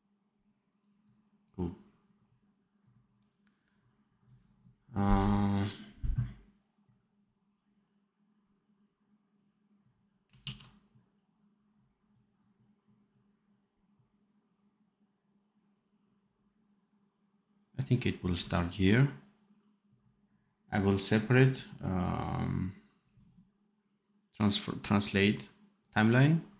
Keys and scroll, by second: 10.4 ctrl+s.